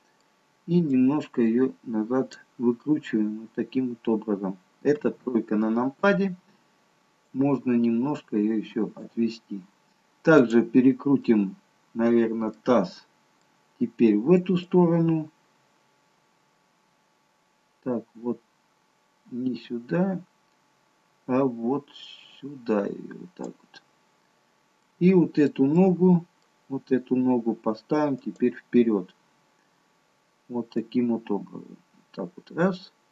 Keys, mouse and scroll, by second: 1.2 click, 5.0 KP_3, 7.7 click, 11.5 click, 11.5 middle click, 13.0 middle click, 14.7 click, 25.0 middle click, 25.8 middle click, 25.8-27.8 scroll up 1, 28.2 click, 31.1 click.